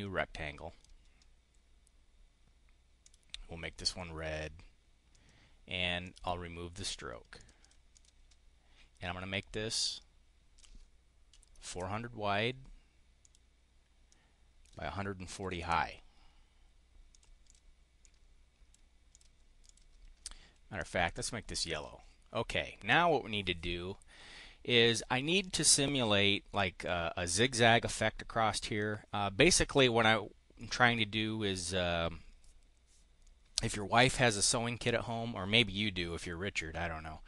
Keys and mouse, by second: 3.0 click, 5.0 click, 6.0 click, 7.4 click, 7.6 click, 7.8 click, 9.7 click, 11.3 4, 11.6 0, 13.2 click, 14.0 click, 15.0-16.1 typing, 17.0 click, 17.4 click, 17.8 click, 19.0 click, 19.4 click, 21.0 click, 21.7 click, 30.5 click.